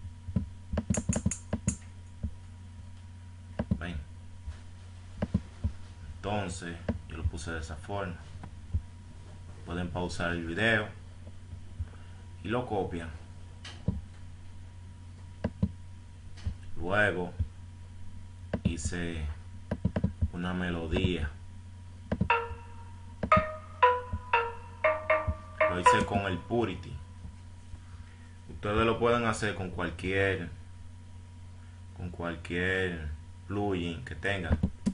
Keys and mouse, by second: 0.4-2.0 drag, 2.7 Escape, 13.9 click, 14.4 F1, 15.8 F1, 20.7 F6.